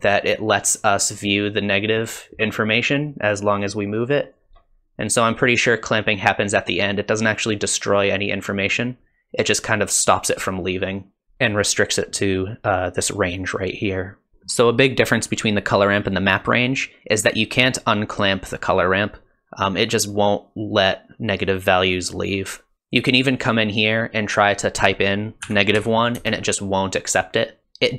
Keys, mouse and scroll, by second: 14.3 ctrl+z, 23.4 click, 27.6 click.